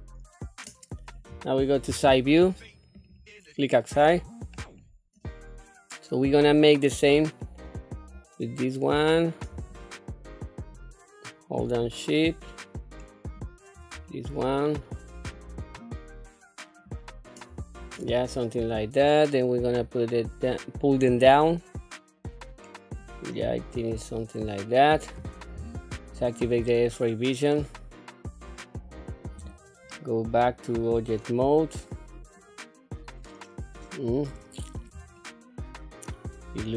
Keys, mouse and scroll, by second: 1.9 KP_3, 3.0 click, 4.5-4.9 scroll up 2, 6.5-8.5 drag, 9.7-10.7 shift+drag, 11.8-13.4 shift+drag, 14.1 shift+middle click, 15.3-16.9 shift+drag, 18.0 scroll down 2, 19.0-19.3 scroll up 1, 21.1-23.0 drag, 23.4 scroll down 2, 23.9-25.0 middle drag, 25.5 q, 26.1 scroll down 2, 26.7-28.6 middle drag, 29.4 Tab, 29.9-33.9 middle drag, 34.3-34.6 scroll up 3, 35.2-36.7 shift+middle drag.